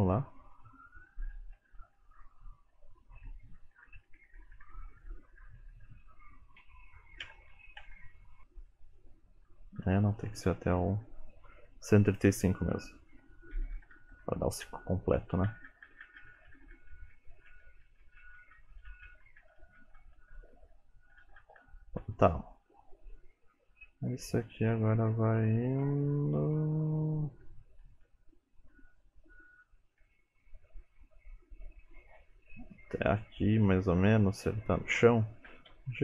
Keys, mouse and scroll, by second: 0.0 Right, 0.4 Left, 0.6 Left, 0.9 Left, 1.2-2.5 Left, 2.5-3.4 Right, 4.1 shift+Left, 4.4-8.1 Right, 8.7 Right, 9.2 Right, 9.9 Left, 12.1 click, 15.5 Left, 15.7 Left, 15.9 Left, 16.1 Left, 16.3 Left, 16.4 Left, 16.6 Left, 16.8 Left, 17.0 Left, 17.2 Left, 17.4 Left, 17.5-19.6 Left, 19.8 Left, 20.0 Left, 20.2 Left, 20.4 Left, 20.6 Left, 20.8 Left, 21.1 Left, 21.3 Left, 21.5 Left, 21.7 Left, 22.1 Left, 23.2 Right, 23.4 Right, 23.7 Right, 23.9 Right, 24.1 Right, 24.4 Right, 24.6 Right, 24.8-25.3 Right, 25.5 Right, 25.7 Right, 25.9 Right, 26.1 Right, 26.3 Right, 26.4-27.5 Right, 27.7 Right, 27.9 Right, 28.1 Right, 28.4 Right, 28.8 Right, 29.6 Right, 30.1 Right, 31.9 Left, 34.1 Left, 35.5 g.